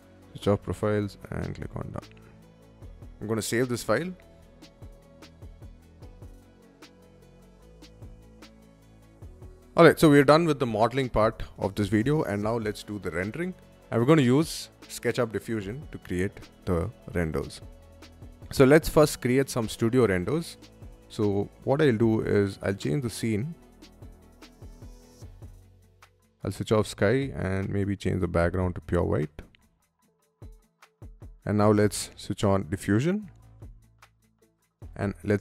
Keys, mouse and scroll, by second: 0.7 click, 1.1 click, 2.0 click, 3.3 click, 4.2 click, 5.3 click, 5.9 click, 6.2-7.9 typing, 7.9 click, 22.6 click, 24.0 click, 24.6-25.3 scroll down 1, 26.0 click, 26.9 click, 28.0 click, 28.9 click, 29.7 click, 31.3 click, 32.4 click, 34.2 click, 34.9-35.4 typing.